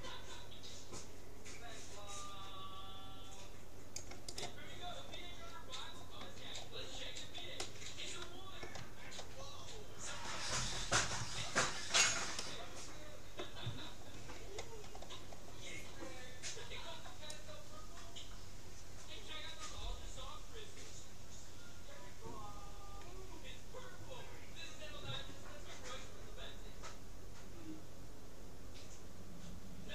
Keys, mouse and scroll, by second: 4.5-6.1 right drag, 5.7-9.5 middle drag, 9.5-10.1 scroll up 1, 10.1 scroll down 1, 10.3-14.2 middle drag, 14.2-14.6 scroll up 1, 14.6-15.3 scroll down 1, 16.7 c.